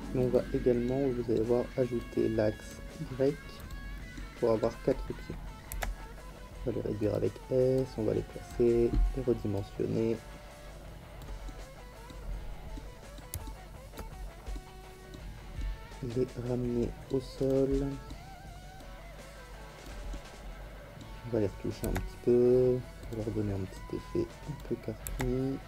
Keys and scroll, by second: 5.7 s, 21.8 s, 25.0 s.